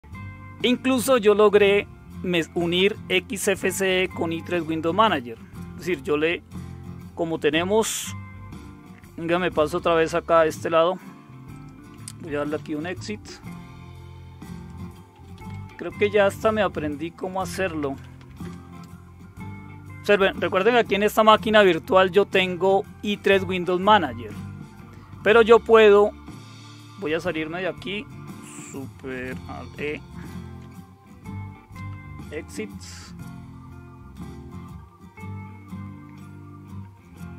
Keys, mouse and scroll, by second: 10.5 click, 11.5 click, 12.1-13.3 typing, 14.5 click, 14.8 click, 15.1-16.2 typing, 15.5 click, 17.2 click, 17.6-18.7 typing, 17.6 click, 23.2 click, 30.3 shift+super+e, 32.3 click.